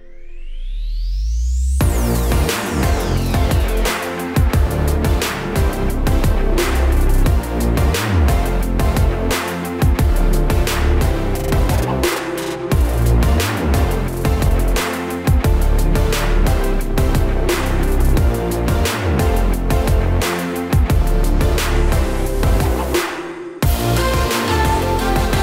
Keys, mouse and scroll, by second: 0.2 click, 0.7 a, 1.3 a, 2.4 Tab, 4.3 click, 6.8 click, 7.4 click, 8.7 click, 9.5 click, 11.6 click, 11.9 middle click, 13.0 right click, 13.8 middle click, 14.6 right click, 15.4 middle click, 16.2 Tab, 16.7 click, 17.4 click, 17.8 click, 18.7 e, 20.5 click, 20.8 shift+click, 21.2 middle click, 21.6 shift+click, 22.0 shift+click, 22.2 middle click, 22.6 shift+click, 22.8 middle click, 24.2 ctrl+z.